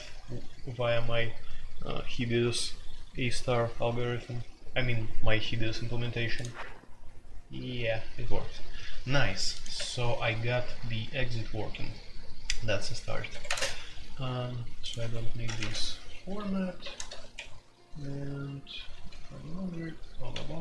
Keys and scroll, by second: 9.7 Escape, 13.3 Escape, 13.4 space, 13.5 Tab, 14.9 Escape, 15.4-20.6 typing, 17.3 Escape.